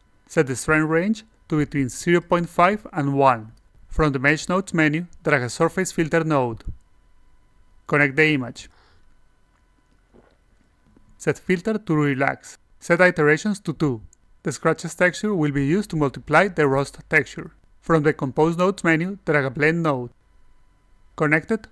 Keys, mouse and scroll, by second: 0.1 click, 0.4 click, 0.9 click, 1.7 click, 3.1-3.7 drag, 4.3 click, 6.2-7.6 drag, 8.1 click, 9.0 click, 9.9 click, 10.4 a, 11.2 click, 12.3 click, 12.8 click, 18.2 click, 19.5-20.9 drag.